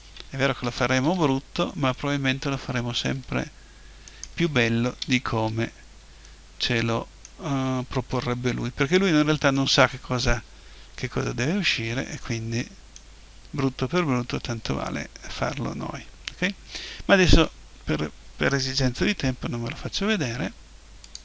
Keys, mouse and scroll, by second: 0.6 Delete, 1.5 right click, 1.7-3.5 middle drag, 3.5 click, 4.0-5.7 right drag, 5.0 Delete, 6.1 middle click, 6.6-8.1 middle drag, 8.2-9.9 middle drag, 10.1-14.0 middle drag.